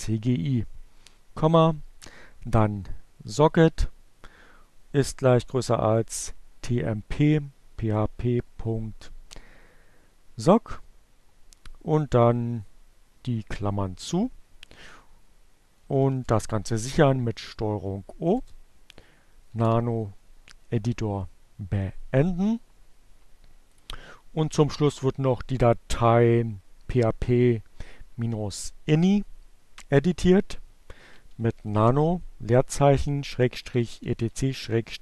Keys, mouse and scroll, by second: 14.2 ctrl+o, 16.8 Return, 17.8 ctrl+x, 22.2 click, 29.3-35.0 typing.